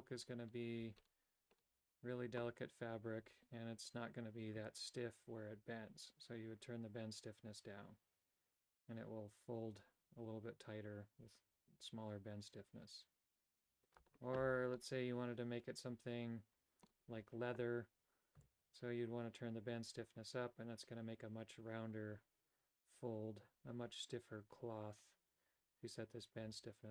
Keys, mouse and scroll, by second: 4.8-14.2 shift+drag, 14.8-17.1 middle drag, 18.5-26.9 shift+drag.